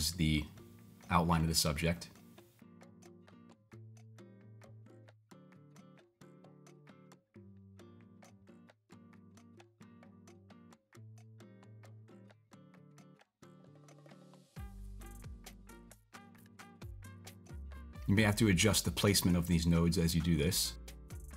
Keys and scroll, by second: 3.0-3.7 typing.